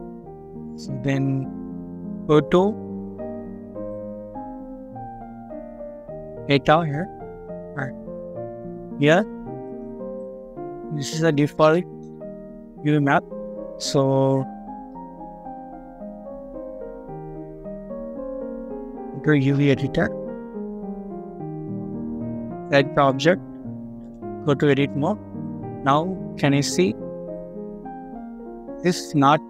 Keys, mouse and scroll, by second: 20.4 middle click, 21.4 scroll up 1, 21.6-24.6 scroll down 1, 25.2 scroll down 1.